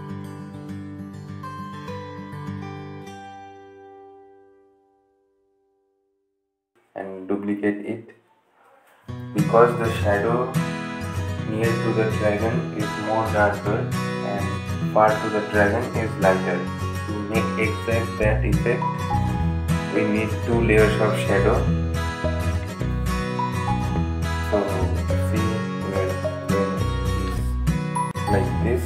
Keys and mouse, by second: 0.8 typing, 6.2 right click, 6.2 typing, 8.2 click, 10.0-10.8 typing, 11.1-16.0 drag, 15.0 typing, 16.3 right click, 17.5 click, 24.0 ctrl+z, 25.3-28.8 drag.